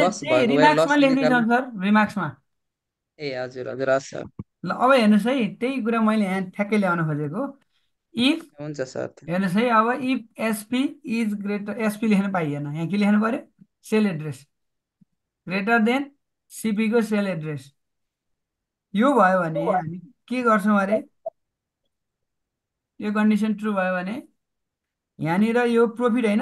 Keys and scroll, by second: 8.3 shift+9, 15.0 shift+., 20.2 shift+0, 25.4 shift+'.